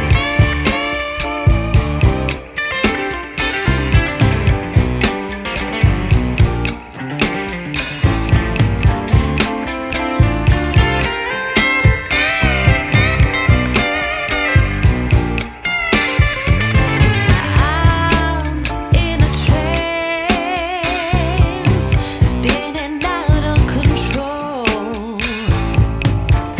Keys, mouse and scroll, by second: 3.1 scroll down 1, 3.3-3.8 scroll up 1, 3.8-4.8 scroll down 2, 5.7 click, 7.1 click, 8.5 ctrl+shift+click, 10.3 click, 11.9 scroll down 1, 12.0 scroll up 1, 12.2 scroll down 1, 12.2 scroll down 2, 12.3 scroll up 1, 12.5 scroll down 1, 12.7 scroll up 1, 12.8-13.3 scroll down 1, 13.9 click, 15.6 click, 18.0 click, 19.1 click, 19.3 F10, 20.4-21.0 scroll up 4, 21.0 scroll down 1, 21.0-21.5 scroll up 2, 21.5 scroll down 1, 21.6 scroll up 2, 21.8 scroll down 1, 22.6 click, 23.9 click, 25.1 scroll up 3, 25.4 scroll down 1, 26.1-26.5 scroll up 1.